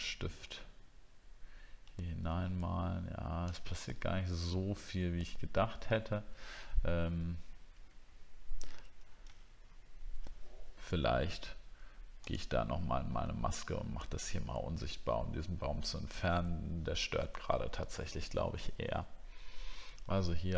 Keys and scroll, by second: 8.0 alt+scroll down 1, 9.3 alt+scroll up 1, 10.0-11.2 alt+scroll up 1.